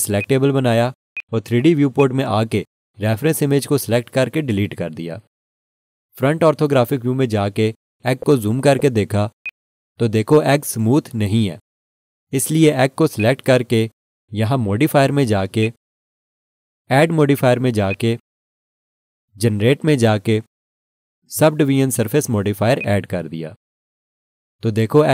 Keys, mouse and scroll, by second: 0.2 click, 6.8 Delete, 6.9 1, 8.0 scroll up 1, 9.4 alt+s, 13.2 click, 22.8 click.